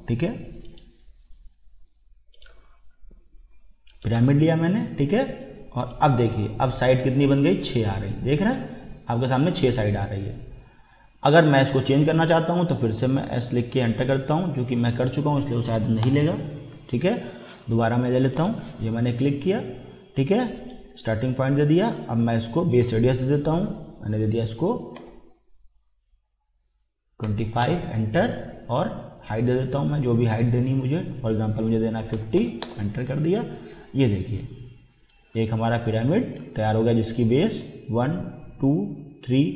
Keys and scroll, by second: 13.2 s, 16.0 Return, 16.7 Escape, 25.0 2, 27.3 5, 27.6 Return, 32.1 5, 32.4 0, 32.6 Return, 36.9 typing.